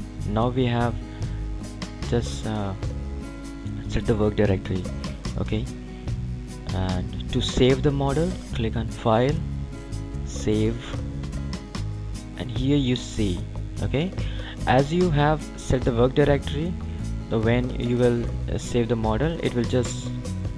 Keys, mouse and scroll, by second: 4.9 click, 8.4 click.